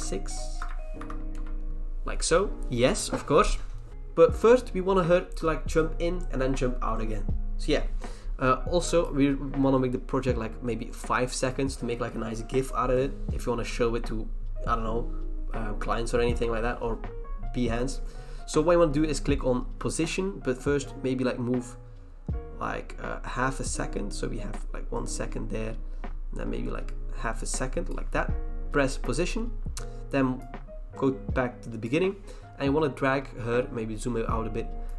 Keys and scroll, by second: 0.6 ctrl+BackSpace, 1.0 6, 1.3 Return.